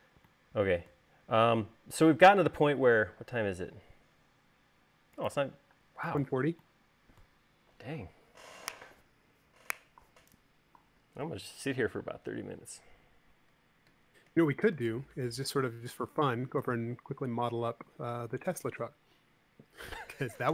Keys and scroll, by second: 6.1 space.